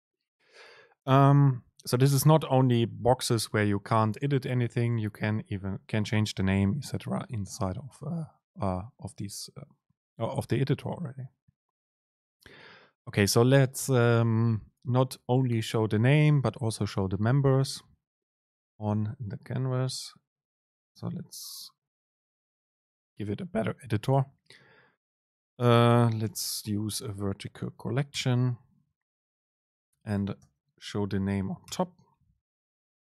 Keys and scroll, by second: 4.7 Left, 5.3 Right, 23.0 shift+Left, 24.5 BackSpace, 24.5 super+space, 30.6 super+space.